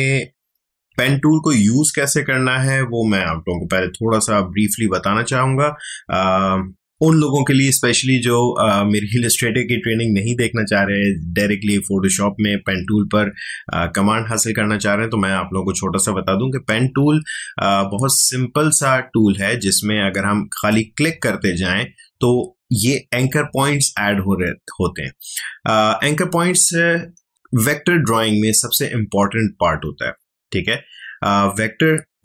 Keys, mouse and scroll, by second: 0.4 ctrl+alt+z, 20.5 click.